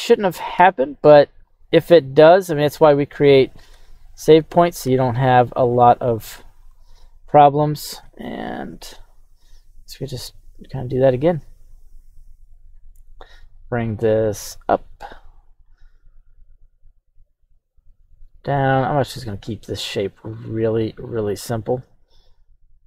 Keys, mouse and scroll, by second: 0.5 Tab, 1.6 right click, 2.4 q, 3.0 right click, 3.7 Tab, 4.1 right click, 4.8 q.